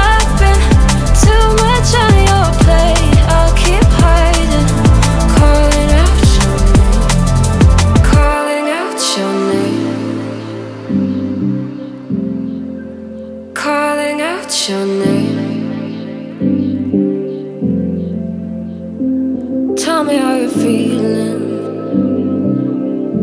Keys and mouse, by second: 1.7 click, 2.5 g, 2.6 z, 3.8 click, 6.0 Tab, 6.7 click, 7.0 click, 7.2 click, 7.4 click, 8.4 shift+click, 8.7 shift+click, 9.8 click, 18.8 click, 19.6 shift+click, 20.0 z, 21.1 click, 22.2 z.